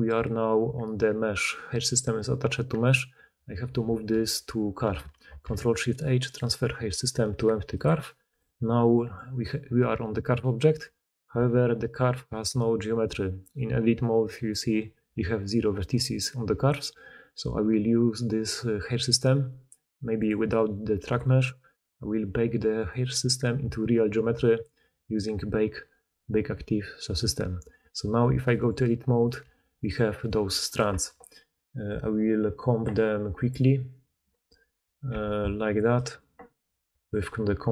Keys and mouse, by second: 5.0 ctrl+shift+h, 8.2 click, 11.4 Tab, 14.4-20.1 middle drag, 16.4 Tab, 20.1 click, 20.2-21.0 middle drag, 21.0-29.2 drag, 28.1 Tab, 29.4 g, 30.0 click, 30.3 g, 30.8 Tab, 32.8-33.4 middle drag, 35.0 a.